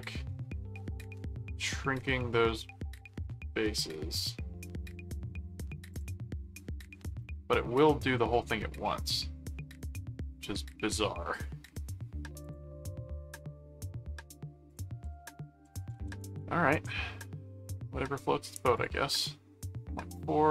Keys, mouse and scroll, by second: 5.9 click, 7.2 middle click, 9.6-11.4 middle drag, 12.4 click, 13.3 middle click, 14.7 click, 15.4-16.8 typing, 18.8 click.